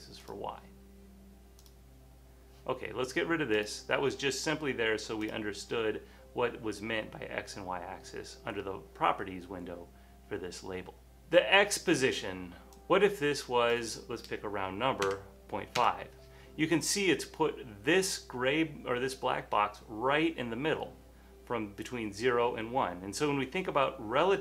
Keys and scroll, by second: 15.1 5, 15.9 Return.